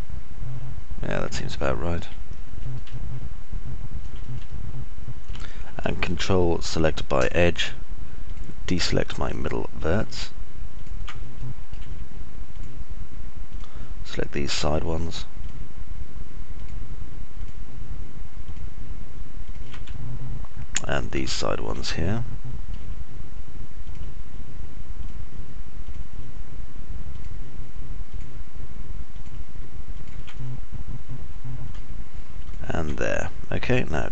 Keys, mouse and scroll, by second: 3.5 alt+middle click, 5.1 alt+click, 5.1 alt+middle click, 5.1 alt+right click, 9.0 ctrl+right click, 10.5 ctrl+right click, 12.1 alt+click, 12.1 alt+middle click, 12.1 alt+right click, 14.1 ctrl+right click, 19.1 ctrl+right click, 20.5-22.3 alt+drag, 20.5-22.3 alt+middle drag, 20.5-22.3 alt+right drag, 22.5 click, 22.5 middle click, 22.5 right click, 28.6 ctrl+right click, 31.1 click, 31.1 middle click, 31.1 right click.